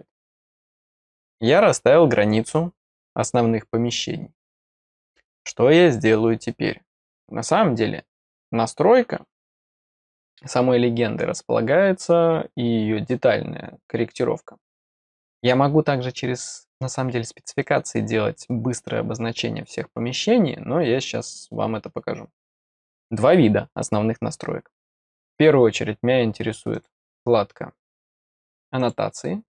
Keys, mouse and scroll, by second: 1.2 click, 26.7 click, 28.7 click.